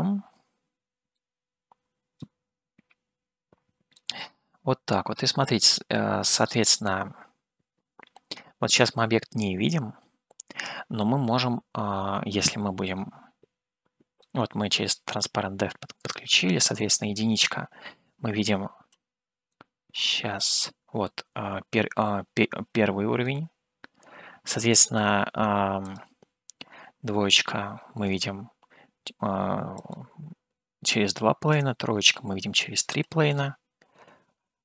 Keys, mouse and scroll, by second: 4.1-9.5 middle drag, 13.4-14.6 middle drag, 16.4-19.1 drag, 19.9-23.9 middle drag, 26.0-28.5 drag, 29.9-33.1 drag, 33.4-34.6 middle drag.